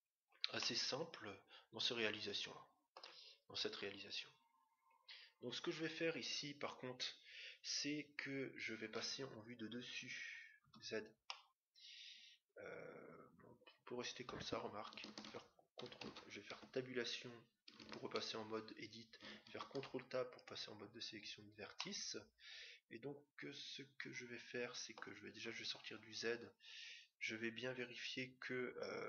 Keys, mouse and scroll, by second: 0.5-2.5 middle drag, 9.0 KP_7, 10.6 z, 11.3-13.0 middle drag, 15.1 ctrl+Tab, 16.6 Tab, 19.4 ctrl+Tab, 21.7-23.4 middle drag, 25.3 z.